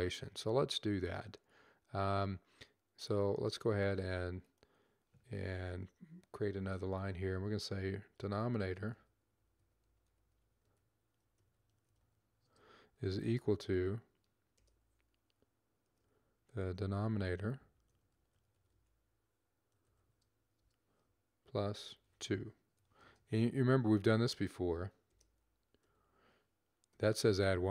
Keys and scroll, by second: 7.9-12.7 typing, 14.3 typing, 15.7-23.1 typing, 24.9-26.9 typing.